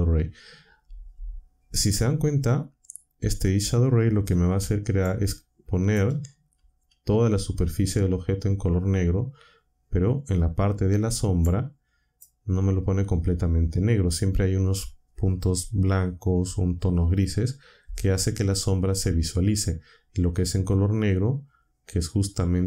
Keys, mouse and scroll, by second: 5.0-6.1 shift+drag, 11.4 click.